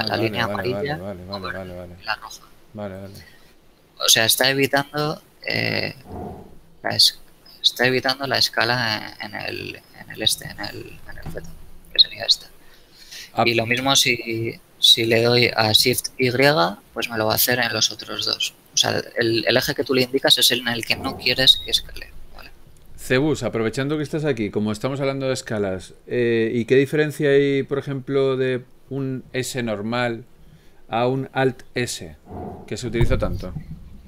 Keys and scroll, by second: 4.0 s, 4.7 z, 7.0 shift+z, 11.0 z, 16.3 shift+y.